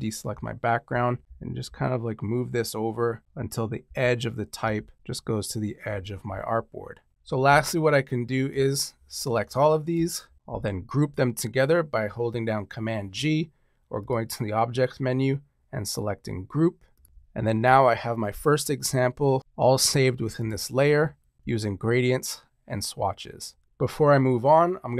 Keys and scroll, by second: 1.2 Left, 3.2 Up, 3.8 Right, 10.4 super+g.